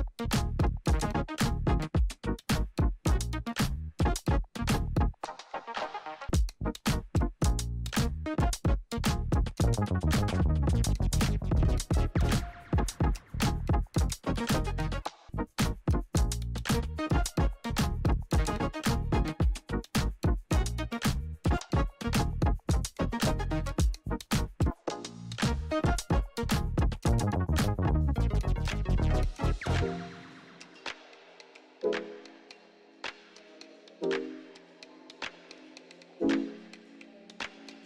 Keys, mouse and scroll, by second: 5.3-13.9 drag, 16.0 click, 20.6 click, 23.2 click, 25.4-37.6 drag.